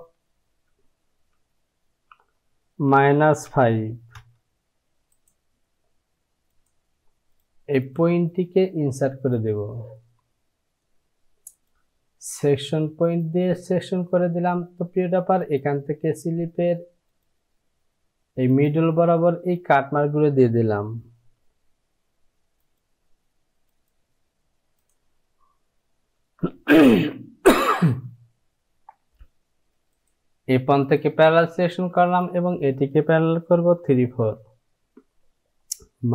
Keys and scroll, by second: 2.4 Down, 2.9 KP_Subtract, 3.5 KP_5, 4.2 Return, 36.0 KP_Subtract.